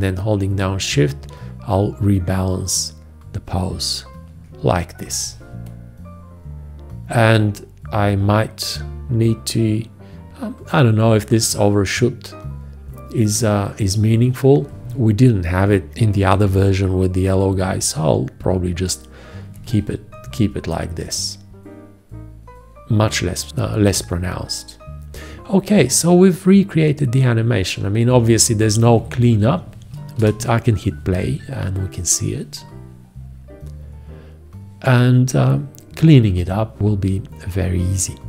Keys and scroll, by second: 29.0 F1, 30.2 Return.